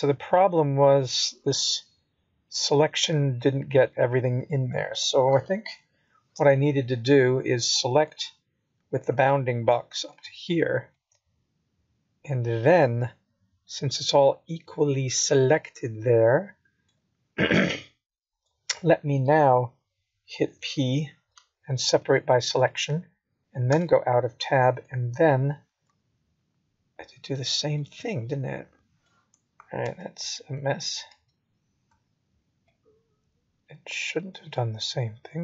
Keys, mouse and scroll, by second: 5.2-6.5 scroll down 1, 6.5-7.1 scroll down 1, 7.1 ctrl+z, 9.7 ctrl+z, 11.9 click, 13.3 g, 15.1 ctrl+z, 15.4 ctrl+z, 18.5 middle click, 24.6 KP_1, 25.5-26.1 scroll up 2, 26.8 b, 29.6 middle click.